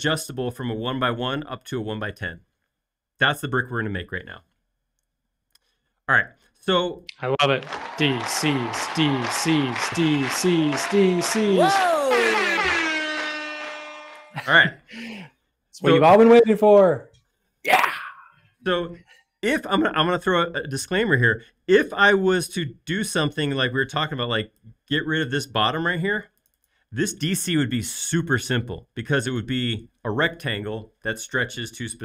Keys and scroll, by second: 5.4 space, 8.8 m, 16.0 space, 23.9 p, 25.9 typing.